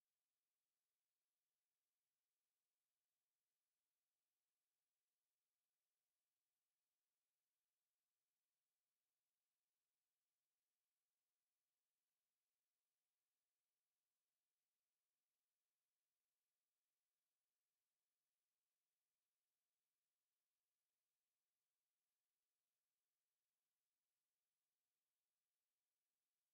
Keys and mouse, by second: 0.9 middle click, 4.1-6.3 right drag, 7.4 ctrl+v, 12.4-14.3 drag, 14.3 middle click, 17.4-22.0 drag, 22.0 middle click, 22.3 KP_7, 24.2-25.7 right drag, 26.2 ctrl+v.